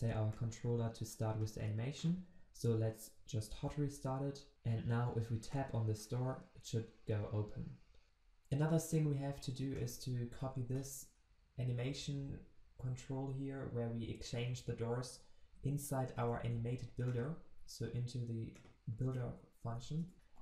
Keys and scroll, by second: 3.6 ctrl+shift+\, 8.0 ctrl+z, 15.4 ctrl+x, 19.0 alt+Return.